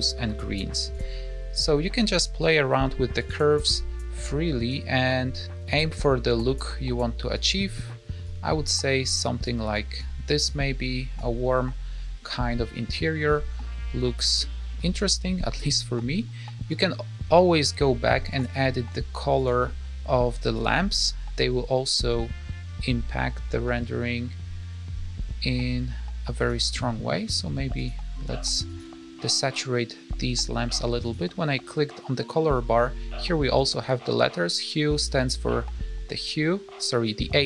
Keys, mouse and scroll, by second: 0.8 click, 3.1 click, 4.1 click, 5.0 click, 7.2 click, 8.2 click, 9.1 click, 9.7 click, 10.4 click, 13.8-15.0 scroll up 3, 14.3 middle click, 15.4 scroll down 2, 15.6 middle click, 16.6 click, 18.2 click, 19.3 click, 27.0 middle click, 27.7 click, 28.6 click, 30.9 click.